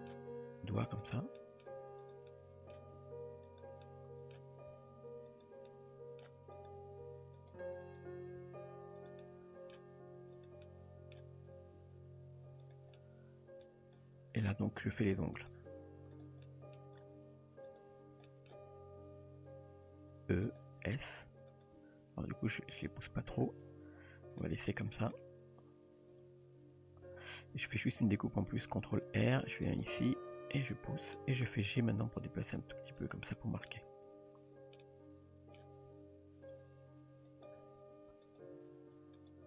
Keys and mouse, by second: 0.4 g, 1.4 middle drag, 2.0 click, 2.3-2.7 middle drag, 2.9 g, 3.8-4.3 middle drag, 4.7 s, 5.7-6.2 middle drag, 6.6 click, 7.1 s, 7.8 click, 8.4 s, 9.2 middle click, 10.4 click, 10.7 middle click, 11.7 g, 13.0-13.6 middle drag, 15.4 click, 16.2 drag, 16.4-16.8 middle drag, 18.3 shift+middle drag, 19.3 e, 20.9 s, 21.8 g, 23.7 Tab, 24.4-25.0 middle drag, 25.6 Tab, 28.1 ctrl+r, 31.2 middle click, 31.9 g, 33.3 Tab, 33.7-35.6 middle drag, 35.8 Tab, 37.3 click, 38.3 click, 39.2 click.